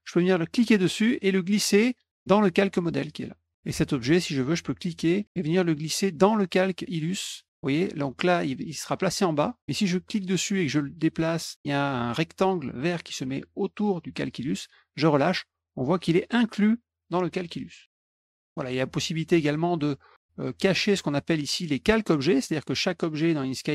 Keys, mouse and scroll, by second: 0.4-2.6 drag, 4.5-9.0 drag, 9.8-14.6 drag, 18.1 click, 20.9 click, 21.7 click, 22.4 click, 23.2 click.